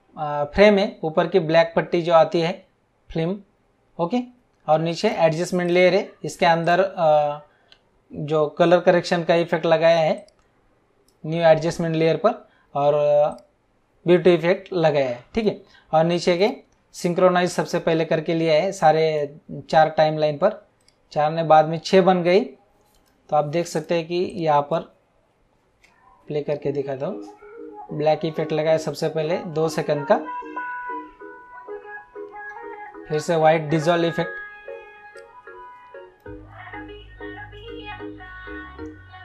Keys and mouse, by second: 4.9 click, 10.1 click, 13.2 click, 16.3 click, 18.7 click, 20.8 click, 23.7 click, 25.6 space, 35.1 click.